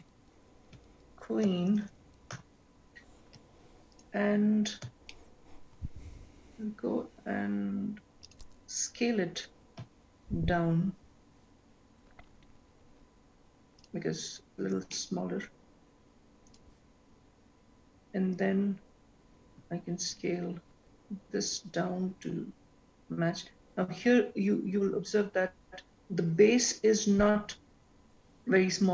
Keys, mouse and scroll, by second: 1.3 e, 4.1 click, 4.7-5.4 scroll up 6, 5.5 shift+middle click, 7.7-8.4 scroll down 1, 8.4 scroll down 2, 8.9 scroll up 1, 9.1 click, 10.1 s, 15.1 shift+middle click, 17.0 click, 19.8 s.